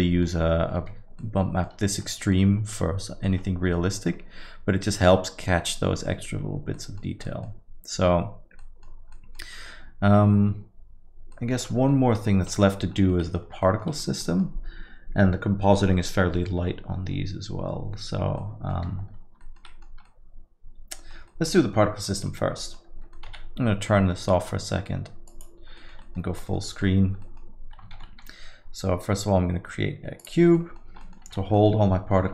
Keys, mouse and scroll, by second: 1.2 ctrl+middle click, 1.6 ctrl+middle click, 2.3 middle click, 6.7 middle click, 7.1-7.4 scroll down 2, 7.2 middle click, 8.6 middle click, 8.9 scroll down 1, 9.1 middle click, 11.3 middle click, 12.3 shift+F5, 12.5 middle click, 12.8 scroll down 1, 13.0 alt+middle click, 13.1 alt+middle click, 13.2 middle click, 13.4 scroll down 1, 13.6 alt+middle click, 14.2 middle click, 18.4 middle click, 19.4 alt+middle click, 19.6 middle click, 19.9 scroll down 1, 20.1 alt+middle click, 21.3 middle click, 22.0 middle click, 22.2 alt+middle click, 22.6 alt+middle click, 23.1 middle click, 23.3 z, 23.9 middle click, 25.3 click, 25.8 alt+middle click, 26.0 middle click, 26.2 scroll down 1, 26.5 alt+middle click, 26.7 middle click, 26.9 scroll down 1, 27.2 alt+middle click, 27.9 shift+a, 30.5 middle click, 30.8 scroll down 1, 31.2 alt+middle click, 31.5 middle click.